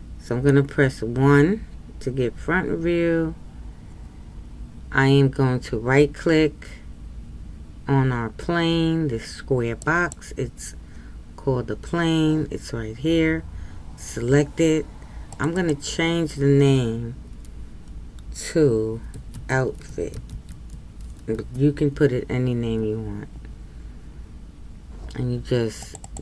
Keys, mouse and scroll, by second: 1.1 KP_1, 9.8-15.4 right drag, 15.5-21.3 drag, 25.9 click.